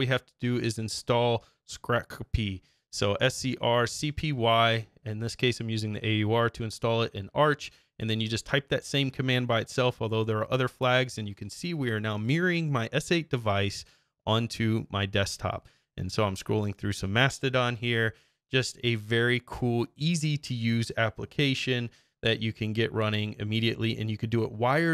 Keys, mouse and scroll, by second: 0.0-1.7 typing, 2.9 click, 3.2 Up, 4.1 Return, 7.1-8.3 drag.